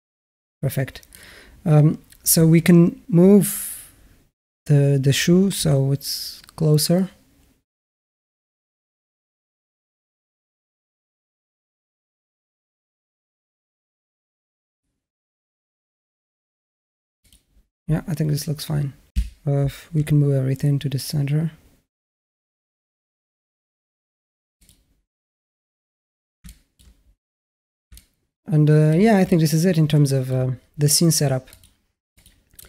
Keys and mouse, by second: 0.9 click, 5.4 g, 19.0 a, 20.1 g, 26.3 shift+middle click, 27.8-28.7 middle drag, 29.1-30.1 alt+middle drag, 31.3 click, 32.0 click.